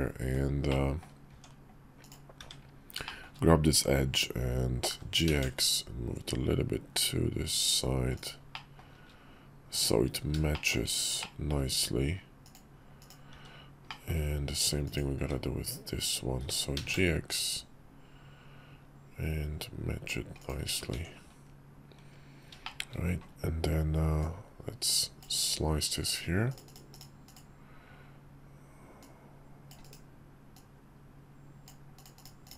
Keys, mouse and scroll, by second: 0.4 middle click, 1.7 Tab, 1.7 click, 2.1 `, 2.8 shift+click, 4.7 g, 8.3 shift+middle click, 10.4 shift+middle click, 11.1 middle click, 12.1 click, 12.7 click, 13.6 middle click, 13.6 `, 14.6 click, 14.9 `, 16.1 g, 20.7 Tab, 22.3 shift+drag, 23.9-25.0 drag, 27.0 click, 28.7-29.4 drag, 30.2-31.4 drag.